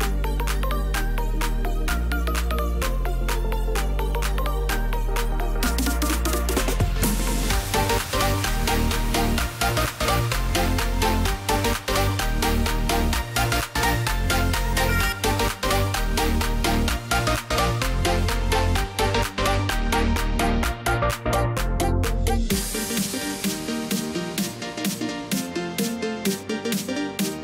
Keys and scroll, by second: 22.7 ctrl+z, 23.7 ctrl+alt+z.